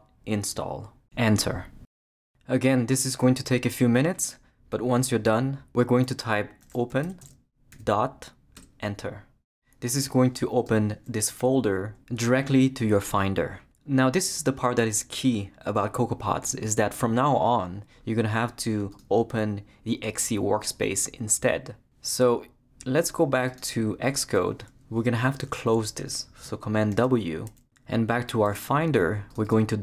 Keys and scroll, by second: 0.0-0.5 typing, 1.7 Return, 6.4-7.7 typing, 8.6 Return, 26.9 super+w.